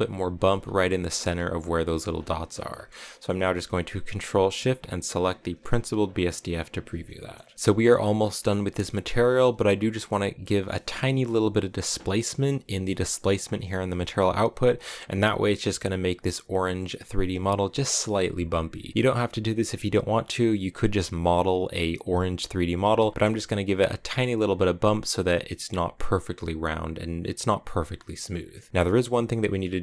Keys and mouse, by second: 0.4 m, 2.6 middle click, 3.0 middle click, 5.1 ctrl+shift+click, 7.0 shift+click, 8.1 middle click, 13.3-15.1 drag, 29.5 middle click.